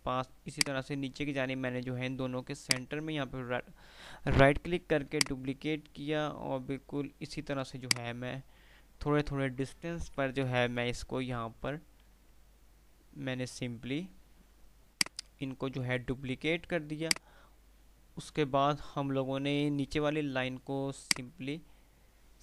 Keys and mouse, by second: 0.7-3.4 drag, 2.8-5.3 right drag, 5.3-8.1 drag, 8.0 ctrl+right click, 9.5 ctrl+r, 15.4-17.4 drag, 16.8 ctrl+right click, 21.1-22.4 alt+drag.